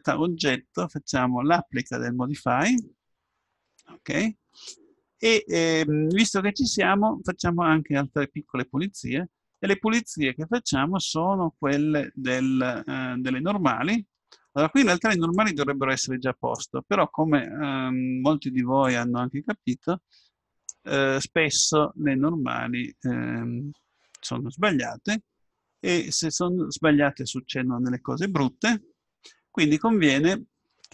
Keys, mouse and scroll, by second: 2.6-4.5 drag, 6.0-8.3 middle drag, 15.4-18.4 drag, 24.9-26.9 middle drag.